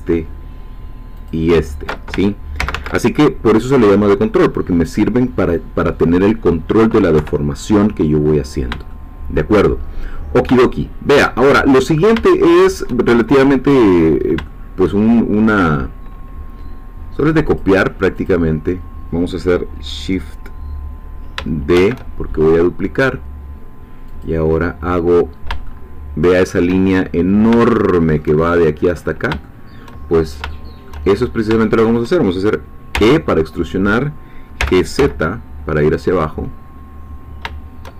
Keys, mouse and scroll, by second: 2.6 ctrl+z, 7.1 3, 8.2-8.5 scroll down 2, 8.9 shift+middle click, 9.8-10.5 shift+scroll down 2, 10.7-11.7 shift+middle drag, 12.1 shift+scroll up 2, 12.3 shift+middle click, 13.1 shift+scroll down 2, 13.4 shift+middle click, 13.9-14.3 shift+scroll up 2, 14.5 shift+middle click, 15.0-15.5 shift+scroll up 2, 17.6 click, 21.8 shift+d, 24.1 click, 25.3-25.7 scroll down 3, 25.7-26.8 shift+middle drag, 26.8 shift+scroll down 1, 27.7-28.7 shift+middle drag, 29.4 shift+middle click, 30.2 shift+scroll up 1, 31.1 shift+scroll up 1, 31.6 shift+middle click, 32.9 e, 34.6 g, 35.5 z.